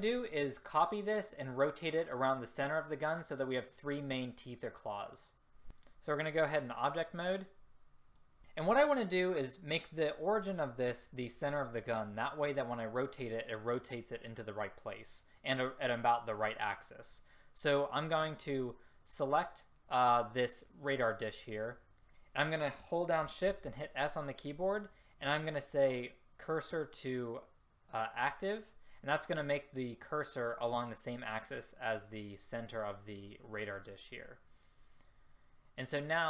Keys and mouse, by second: 18.6-22.1 drag, 22.1 shift+s, 23.5 shift+s.